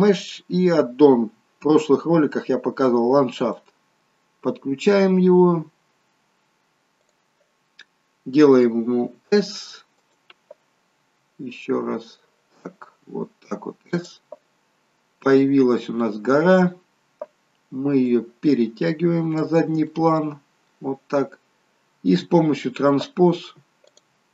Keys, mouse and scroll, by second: 7.0 click, 8.9 s, 11.0 s, 14.9 scroll down 4, 15.2 middle click, 18.1 click, 19.9 middle click, 21.3-21.7 scroll up 6, 23.9 click.